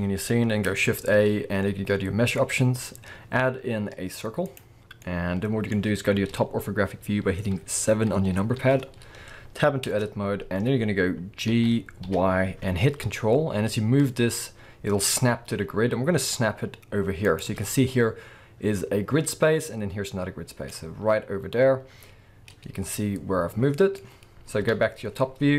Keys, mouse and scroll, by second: 0.9 shift+a, 8.6 KP_7, 9.9 Tab, 10.1-10.9 scroll up 1, 10.9-11.5 scroll down 1, 11.5 g, 17.4 ctrl+click, 20.5 scroll down 2, 20.7-22.9 middle drag, 24.6 KP_7, 25.2-25.5 scroll up 1.